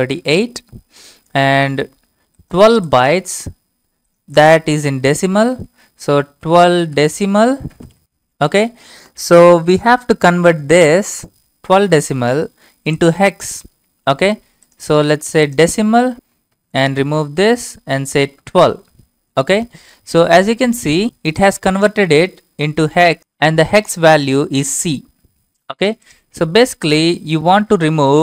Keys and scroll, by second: 6.3-8.5 typing, 16.6 BackSpace.